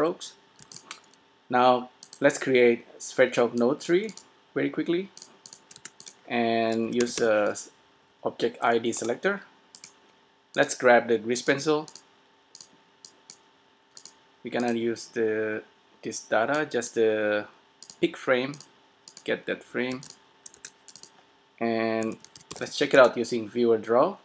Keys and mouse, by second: 0.4 a, 0.9 s, 2.1 click, 5.8 shift+a, 8.1 Down, 10.6-15.8 drag, 16.7 click, 20.1 s, 20.7 shift+a, 22.6 e.